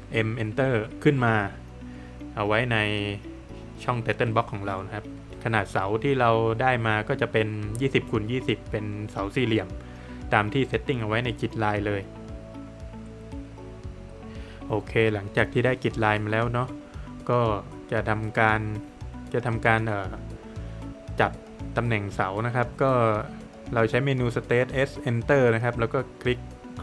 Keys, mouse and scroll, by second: 0.6 click, 1.0 scroll up 1, 1.9 scroll up 1, 2.6 middle click, 3.0 Escape, 3.3 middle click, 3.9 scroll up 1, 4.6 Escape, 4.7 scroll down 1, 5.2 middle click, 5.9 scroll up 1, 6.6 middle click, 7.1 Escape, 7.7 click, 7.9 double click, 8.8 Escape, 9.1 scroll down 1, 9.8 middle click, 10.2-10.7 scroll up 1, 10.7 Escape, 10.9 scroll down 1, 11.1 middle click, 11.5 scroll down 1, 11.6 scroll up 1, 12.4 Escape, 13.5 click, 15.6 middle click, 16.6 Escape, 21.4 space, 21.9 scroll down 1, 22.9 click, 24.5 scroll up 1, 25.1 space, 25.6 click.